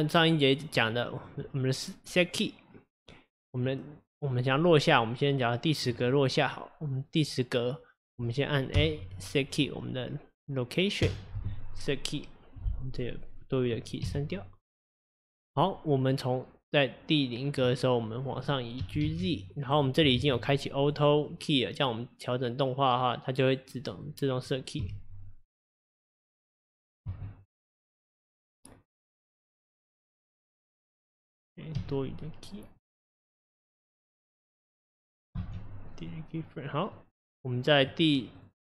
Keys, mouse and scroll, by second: 0.8 click, 3.6-11.1 drag, 11.1 i, 13.0-18.8 drag, 18.8 g, 20.2 ctrl+z, 24.1-29.1 drag, 31.1-34.2 drag, 34.5-36.0 drag, 36.0 x, 36.9-38.4 drag.